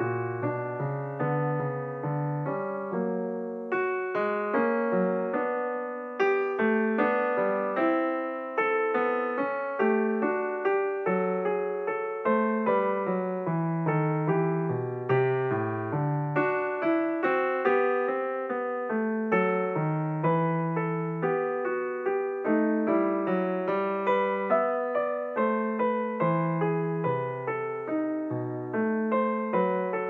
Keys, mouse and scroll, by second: 3.2 click, 4.9-6.9 drag, 6.9 x, 10.4 click, 11.9 x, 20.4 click, 21.6 click, 24.1 click, 26.9-27.9 scroll down 4, 27.9-30.0 drag.